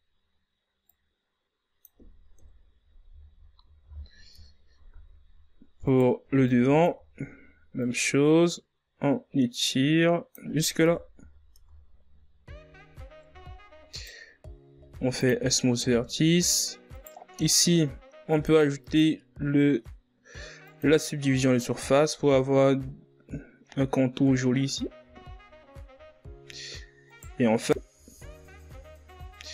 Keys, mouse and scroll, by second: 0.8 KP_1, 2.2-3.7 middle drag, 3.7-5.2 drag, 5.2-7.7 typing, 8.7 right click, 9.0 b, 9.8 z, 10.6-13.6 drag, 13.6 KP_1, 14.0 z, 14.4 Tab, 15.4 z, 15.8 ctrl+scroll down 2, 16.1 a, 16.7 right click, 17.5 w, 18.6 a, 19.7 right click, 21.1-24.5 drag, 24.5 scroll up 4, 27.9 a, 28.3 scroll down 5, 28.9 ctrl+scroll down 5.